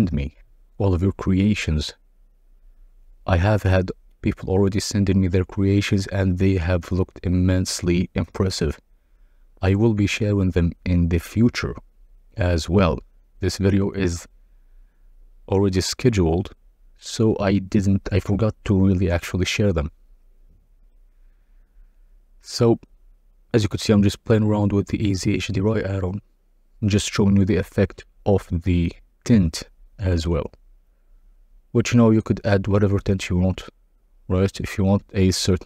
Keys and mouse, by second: 3.6-9.5 shift+drag, 11.3 click, 13.3-16.5 drag, 18.6 click, 20.6-24.0 drag, 24.9-26.2 drag, 26.9 click, 33.6-35.6 drag.